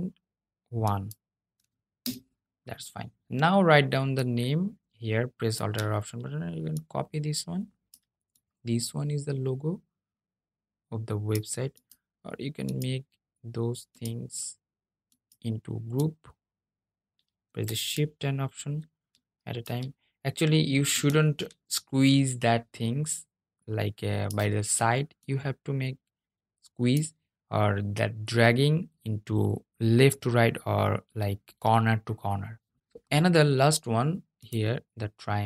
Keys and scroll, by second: 20.0 super+z.